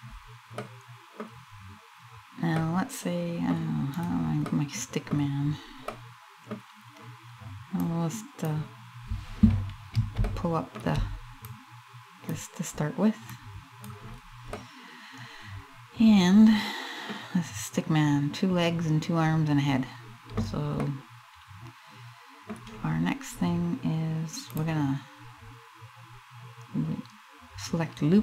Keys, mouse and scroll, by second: 0.2 middle click, 2.2 middle click, 3.6 right click, 4.1 middle click, 4.8-5.2 scroll down 2, 5.5 middle click, 7.5 click, 9.9 shift+middle click, 11.1 click, 13.0 click, 13.8-14.5 scroll down 2, 14.2 middle click, 20.4 middle click, 24.0 click.